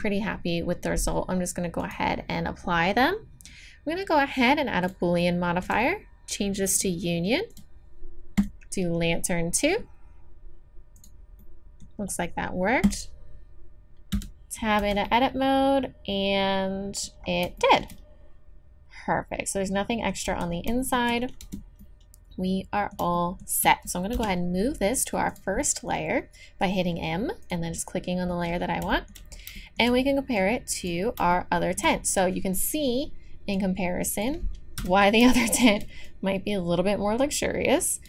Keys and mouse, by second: 1.8-4.9 drag, 5.7-9.4 drag, 11.0 click, 11.4-14.2 middle drag, 14.2 Tab, 14.2 click, 14.8 z, 15.1-17.1 drag, 20.3 z, 20.5 click, 20.6-22.2 drag, 21.4 Tab, 24.1 m, 27.4-28.9 drag, 28.9 middle click, 30.4-32.1 middle drag, 33.5-34.8 drag, 34.8 KP_1.